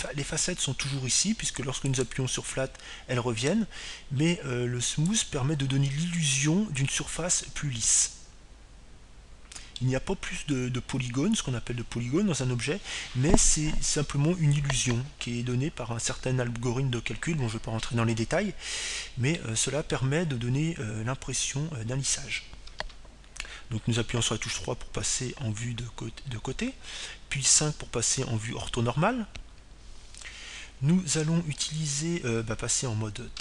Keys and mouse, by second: 1.5-3.1 middle drag, 3.8-5.7 drag, 7.1-8.9 drag, 10.1-12.0 middle drag, 21.5-23.5 middle drag, 24.9 KP_3, 29.4 KP_5.